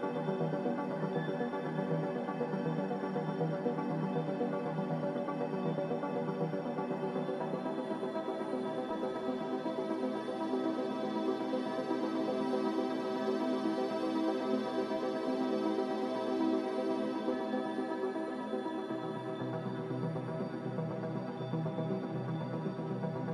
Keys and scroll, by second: 20.1 typing, 21.2 5, 21.3 Return, 22.5 1, 22.7 Return.